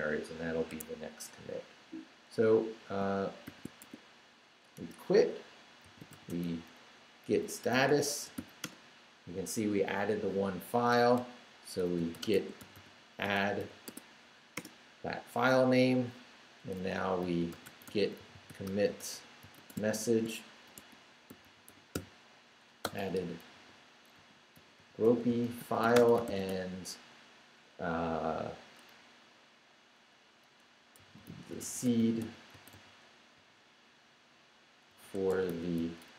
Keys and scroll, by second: 0.7 Escape, 3.4-8.9 typing, 11.2-13.6 typing, 13.9 Tab, 14.5 Return, 17.0-26.8 typing, 30.8-33.3 typing, 34.7-36.0 typing.